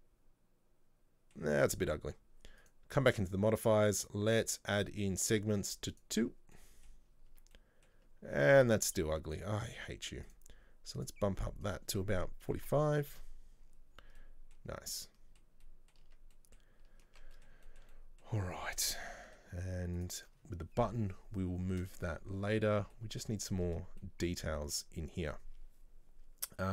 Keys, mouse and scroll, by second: 2.7 click, 6.0 click, 6.6 middle click, 7.2 scroll up 1, 7.4 Tab, 7.6 middle click, 8.1 Tab, 10.4 click, 11.7-13.8 drag, 13.8 scroll down 1, 14.3-14.8 middle drag, 14.8 scroll up 1, 15.1-16.1 middle drag, 16.1 Tab, 16.4 middle click, 16.7-17.1 scroll down 3, 17.1 Tab, 17.4-18.5 middle drag, 18.5-19.1 scroll up 1, 19.1-20.1 middle drag, 20.1 right click, 23.0-25.3 middle drag, 25.3-25.8 scroll up 2.